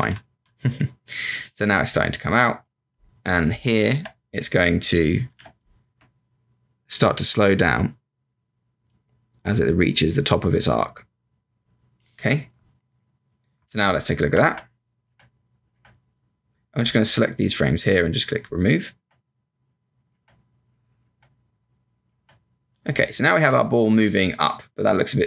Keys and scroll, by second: 0.1 Up, 0.3 Up, 1.6 space, 5.2 b, 5.4 space, 13.6 space, 14.4 Return, 15.0 Return, 17.5 Return, 18.9 Return, 21.1 Return.